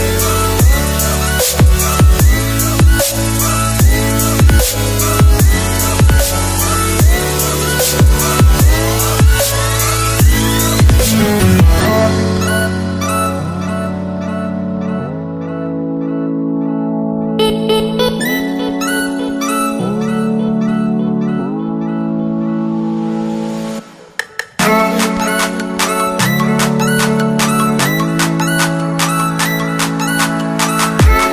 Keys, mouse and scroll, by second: 0.6 click, 2.3 click, 5.4 Left, 9.2 shift+click, 10.2 Return, 10.4 Up, 11.4 click, 11.7 Right, 12.4 click, 12.6 Right, 13.6 click, 14.5 Tab, 14.9 click, 16.9 Tab, 18.4 click, 18.9 Down, 20.7 click, 22.0 Return, 23.1 Tab, 24.1 Tab, 24.5 Tab, 25.0 click, 27.7 Down, 28.8 Tab, 29.2 Tab, 29.8 scroll down 1.